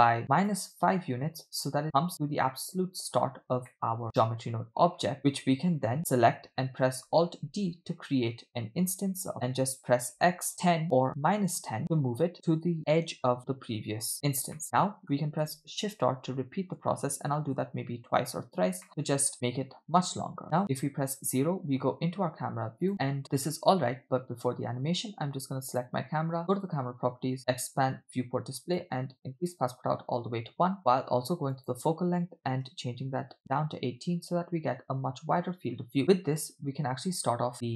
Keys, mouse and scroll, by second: 1.0-1.7 middle drag, 1.8-2.1 scroll up 2, 2.2-2.5 scroll down 1, 2.6-3.2 middle drag, 3.7-4.0 middle drag, 4.1 click, 5.0 scroll down 1, 5.2-6.0 middle drag, 7.5 alt+d, 14.6-15.1 middle drag, 15.8 shift+r, 16.5 scroll down 2, 17.4 shift+r, 18.9-20.4 middle drag, 19.3 scroll up 2, 20.4 scroll up 1, 20.7 KP_0, 22.9 click, 25.7 click, 26.6 click, 27.5 click, 27.9-28.3 scroll down 2, 28.8 click, 30.9 scroll up 2, 31.6-33.3 drag.